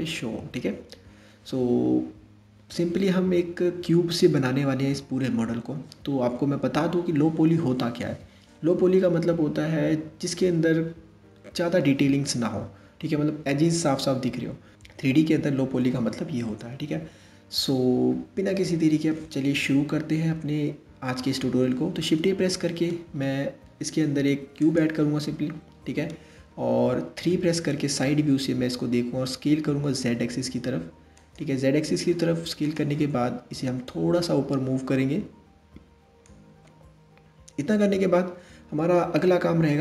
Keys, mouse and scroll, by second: 22.1 shift+a, 26.8 KP_3, 28.8 s, 32.2-33.6 drag, 37.9-38.8 scroll up 2, 38.8-39.8 middle drag.